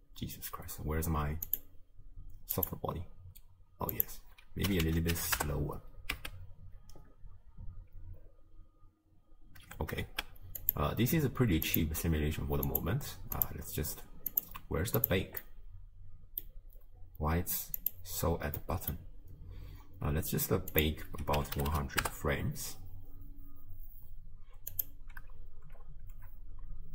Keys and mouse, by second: 1.6 click, 2.6 click, 4.0-5.5 drag, 6.2 space, 9.6 space, 10.7 click, 11.7 click, 12.7 click, 13.4 click, 14.4 click, 15.0 drag, 15.5-16.5 drag, 17.9 click, 18.6 click, 20.8-22.1 drag, 21.7 0, 24.8-26.9 drag.